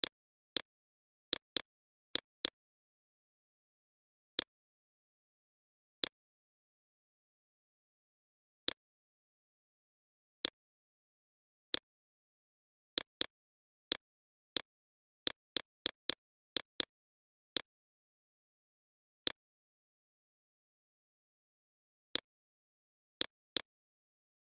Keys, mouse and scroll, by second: 0.2 click, 0.9 BackSpace, 1.5-19.5 drag, 20.2-24.5 alt+shift+drag.